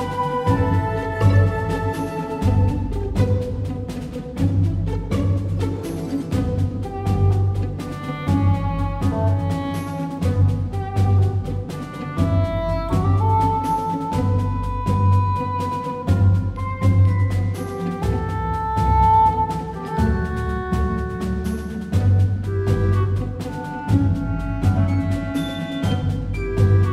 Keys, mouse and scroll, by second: 0.2 KP_1, 0.9 shift+a, 6.4 click, 6.5 Tab, 7.9 a, 8.2 a, 8.7 s, 11.4 click, 11.7 s, 11.9-13.3 drag, 14.1 KP_7, 18.0 s, 22.3 Tab.